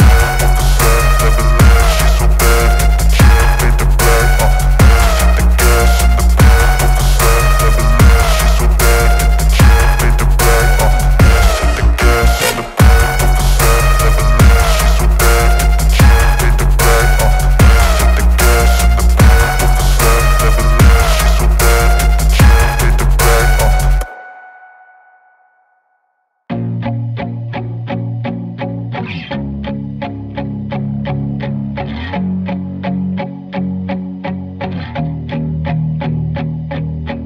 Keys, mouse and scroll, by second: 1.4 alt+scroll up 1, 2.6-3.3 alt+scroll down 1, 4.9 click, 8.6 ctrl+alt+shift+e, 10.3 click, 12.8 click, 14.3 alt+scroll up 1, 16.0-16.5 alt+scroll down 1, 18.1 alt+scroll up 1, 18.5-18.8 alt+scroll down 1, 19.4-20.2 alt+scroll down 2, 20.3-20.6 alt+scroll up 1, 20.6 alt+scroll down 1, 23.3 alt+scroll up 1, 25.0-25.5 alt+scroll down 1, 25.9 alt+scroll up 1, 26.3 alt+scroll, 26.3-26.8 alt+scroll down 1, 27.3 click, 29.2 click, 32.6-37.2 drag.